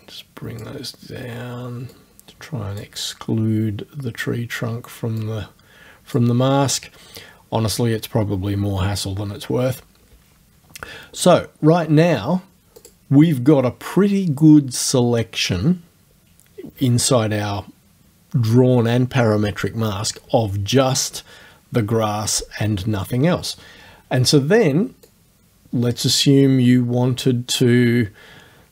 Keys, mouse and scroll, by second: 2.0-3.0 drag, 5.3 click, 12.8 click, 25.1-27.8 drag.